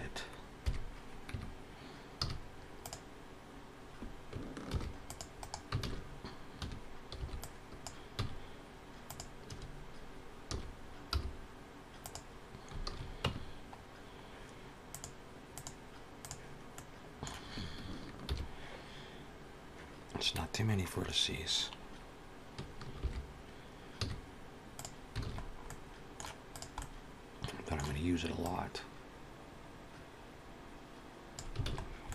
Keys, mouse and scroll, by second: 0.5 KP_3, 1.1 Tab, 2.0 z, 4.6 ctrl+r, 5.6 alt+a, 6.4 1, 7.0 b, 8.0 x, 9.3 a, 10.4 s, 12.7 alt+a, 13.1 Tab, 14.7 click, 16.6 middle click, 18.1 shift+h, 22.8 alt+h, 23.9 z, 25.1 alt+a, 25.2-25.6 scroll down 3, 25.5 middle click, 26.3 click, 26.6 middle click, 28.2 click, 31.5 alt+a, 31.6 scroll down 3, 31.9 middle click.